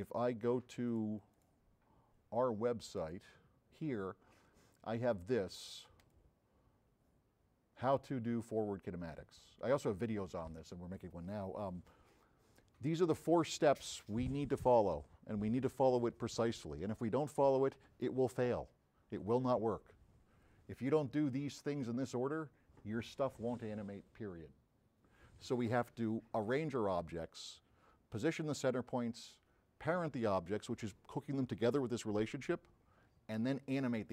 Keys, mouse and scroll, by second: 1.0 click, 1.4 click, 1.4 middle click, 3.1 click, 3.1 middle click, 6.1 click, 6.1 middle click, 11.8-13.6 middle drag.